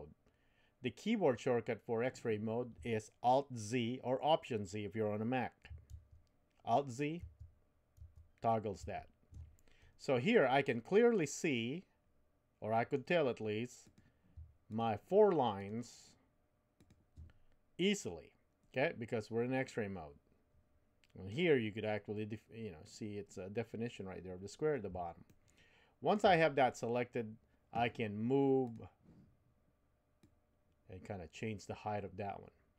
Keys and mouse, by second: 5.9 alt+z, 7.2 alt+z, 8.0 alt+z, 8.8 alt+z, 10.7-13.0 middle drag, 13.9 click, 14.7 shift+click, 15.5 shift+click, 16.8 shift+click, 18.7-21.3 middle drag, 25.3-26.3 shift+middle drag, 28.7 click, 30.3-32.7 drag.